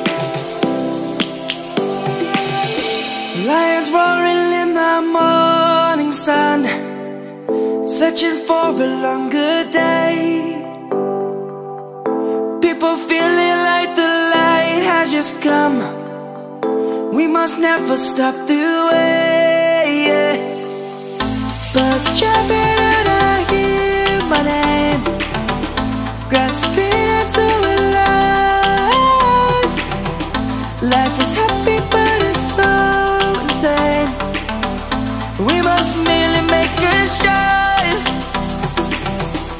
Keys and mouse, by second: 6.7 click, 8.3 Tab, 9.1 click, 10.1 middle click, 11.9 middle click, 12.5 click, 15.6 Tab, 15.9 click, 26.4 Tab, 26.8 click, 27.3 middle click, 29.6 click, 31.2 click.